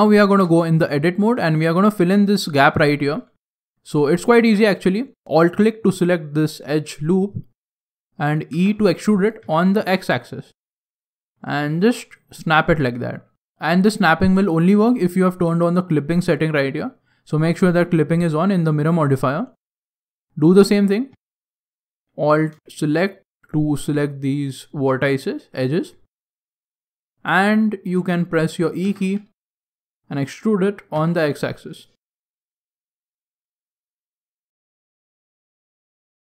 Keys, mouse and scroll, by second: 0.3 Tab, 0.6 middle click, 1.1 scroll down 1, 1.1 scroll up 5, 1.4 shift+middle click, 1.7 middle click, 2.1 shift+middle click, 4.1 alt+right click, 5.7 scroll down 2, 5.7-6.1 scroll down 3, 5.8-6.1 scroll up 1, 7.5 middle click, 8.4 e, 16.8 click, 17.3 click, 19.0 middle click, 19.6 shift+middle click, 19.8 middle click, 20.3 scroll down 1, 20.5 middle click, 21.3 alt+right click, 21.8 middle click, 22.7 shift+middle click, 23.1 middle click, 32.1 middle click, 34.5 middle click, 34.7 shift+middle click, 34.9 middle click, 35.6 scroll down 5, 35.7 middle click, 35.7 scroll up 1.